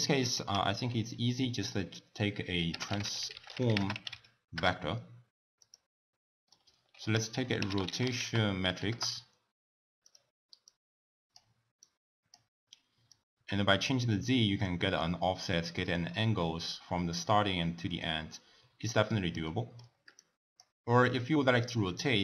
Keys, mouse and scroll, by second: 0.3 ctrl+a, 6.1-6.9 middle drag, 6.9 ctrl+a, 10.6-16.1 drag, 16.1 scroll up 1, 16.2-20.1 middle drag, 20.1 click.